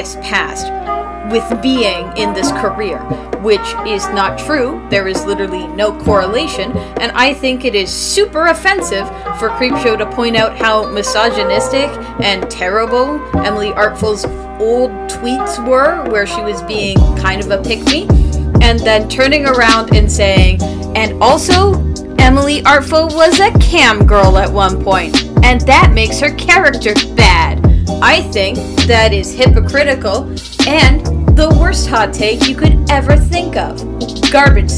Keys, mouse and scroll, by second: 5.2 space, 6.3 space, 6.7 space, 8.0 space, 8.1 ctrl+z, 15.3 space, 16.1 space, 16.4 space, 18.6 space, 19.2 ctrl+s, 21.0 space, 21.3 ctrl+s, 21.5 ctrl+s, 21.9 ctrl+s, 22.1 ctrl+z, 23.6 ctrl+z, 27.9 ctrl+z, 31.5 ctrl+z, 32.1 ctrl+z, 32.9 ctrl+s, 33.2 ctrl+z, 34.1 ,, 34.4 ,.